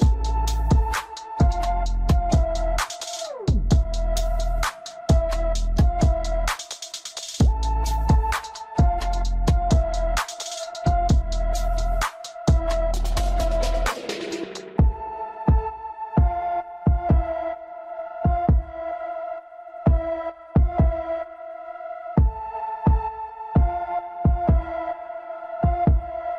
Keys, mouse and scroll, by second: 3.0-5.6 middle drag, 5.6 scroll down 2, 5.9-8.9 middle drag, 8.9 r, 13.0-14.9 middle drag, 14.9 Tab, 16.6 click, 17.2-19.4 drag, 19.4-19.7 scroll down 1, 19.7-20.8 middle drag, 20.8 scroll up 2, 21.0-24.1 middle drag.